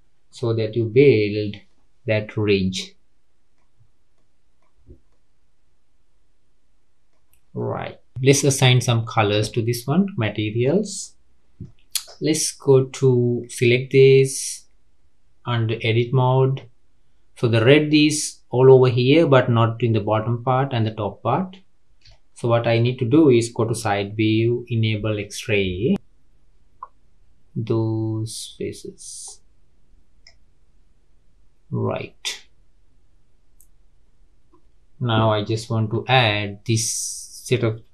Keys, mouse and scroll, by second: 1.0 Tab, 1.6-3.7 middle drag, 3.7-4.1 scroll up 3, 4.1-4.7 middle drag, 4.7-5.1 scroll down 2, 5.1-7.2 middle drag, 7.2 scroll down 3, 7.5-8.7 middle drag, 8.7-9.2 scroll down 2, 9.2-13.4 middle drag, 13.4 click, 15.7 Tab, 16.8-19.2 scroll up 2, 22.1 shift+middle click, 22.7-23.7 scroll up 1, 23.7 KP_3, 25.1 click, 36.6 scroll up 2.